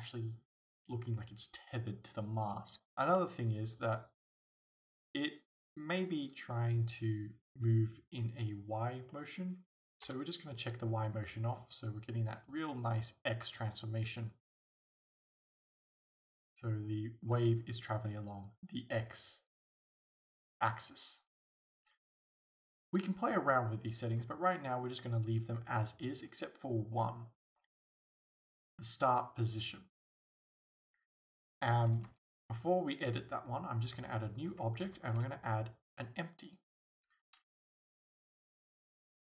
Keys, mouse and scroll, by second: 3.2 middle click, 5.3-6.3 middle drag, 6.3-8.2 drag, 8.2-10.2 middle drag, 10.1 KP_0, 10.4-32.0 middle drag, 32.0 alt+a, 32.9-39.3 drag, 37.8 g.